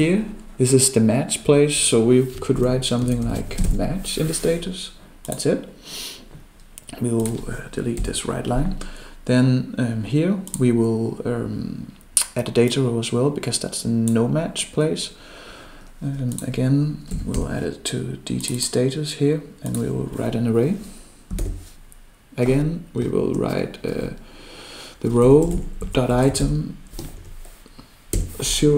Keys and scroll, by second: 21.4 ctrl+alt+7.